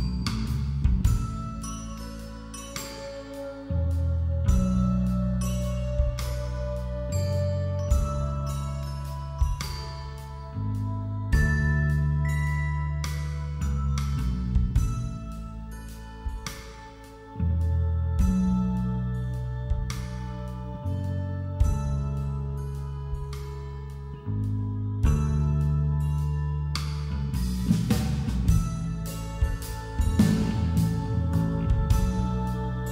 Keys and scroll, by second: 2.1 [.